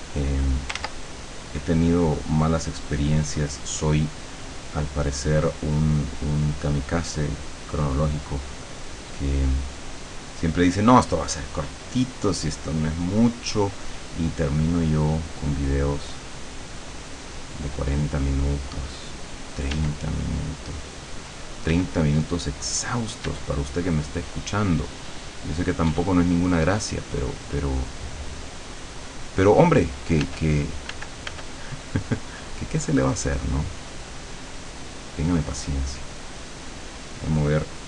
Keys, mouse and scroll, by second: 0.9 ctrl+z, 1.5-2.7 drag, 3.0 click, 4.8-15.3 drag, 16.5-17.9 drag, 19.8 d, 20.3-22.3 drag, 21.7 d, 22.5-30.9 drag, 23.3 d, 25.9 d, 30.3 f, 31.3-35.5 drag, 31.3 f, 37.7 click.